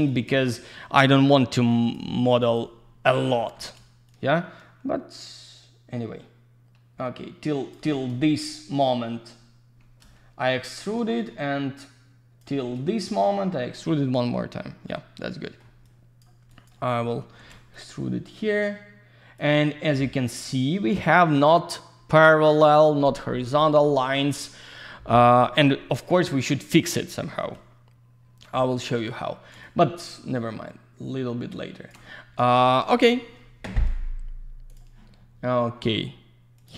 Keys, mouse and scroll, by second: 0.1 alt+click, 2.4 alt+click, 3.3 w, 4.1 shift+click, 10.6 shift+click, 14.9 alt+middle click, 15.8 click, 16.5 alt+click, 17.0 scroll up 1, 17.7 shift+click, 28.5 middle click, 29.6 shift+click, 34.7 click, 36.6 click.